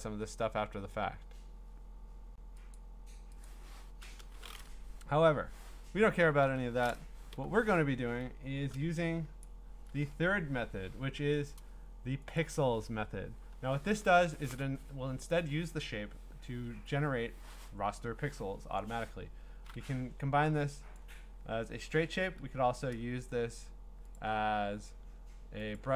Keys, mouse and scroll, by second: 2.7 click, 3.4 click, 5.0 Delete, 6.4 ctrl+a, 7.3 Delete, 8.3 scroll, 9.4 click, 10.2 Escape, 11.5 click, 12.4 click, 21.0 click, 24.2 click, 25.8 click.